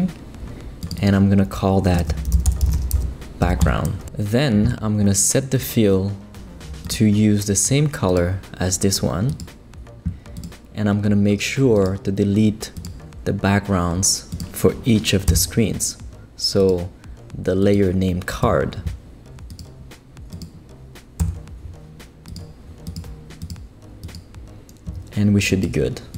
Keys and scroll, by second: 1.8-3.4 typing, 3.6 Return, 15.3 BackSpace, 18.4 BackSpace, 21.2 BackSpace.